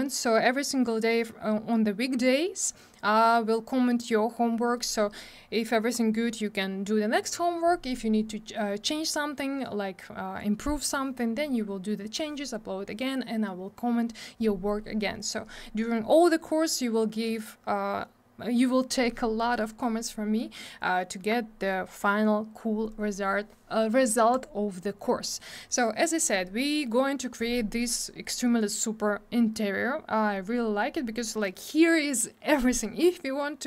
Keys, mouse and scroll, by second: 24.3 click, 24.4 click, 29.2 scroll down 1, 32.1 scroll up 1.